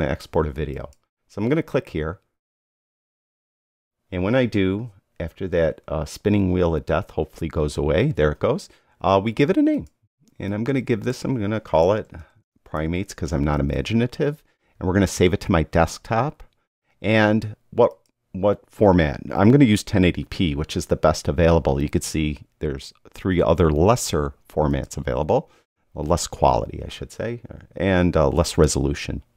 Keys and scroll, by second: 11.9-14.8 typing.